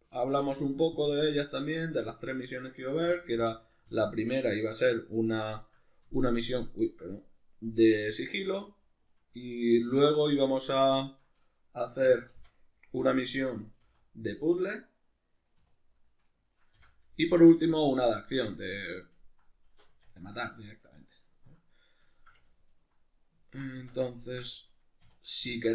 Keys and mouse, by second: 0.2 shift+right click, 0.4 x, 2.0 2, 2.2 right click, 3.1 f, 3.3-7.3 middle drag, 3.9 f, 7.3 right click, 7.7 f, 7.9-10.1 middle drag, 8.3 f, 9.9 1, 10.1 right click, 10.5-13.1 middle drag, 12.0 e, 13.1 click, 13.8 g, 14.4 click, 14.6-16.1 middle drag, 15.6 2, 16.1 right click, 16.8 f, 17.4 right click, 17.6 f, 17.9-23.8 middle drag, 19.9 Tab, 23.8 Tab, 25.0 2, 25.5 alt+right click.